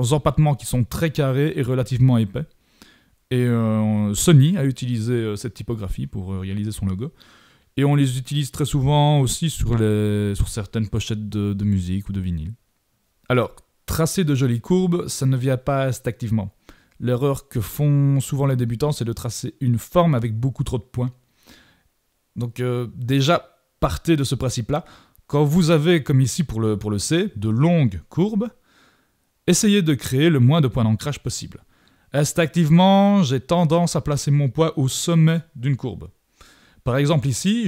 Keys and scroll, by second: 28.0 shift+super+=.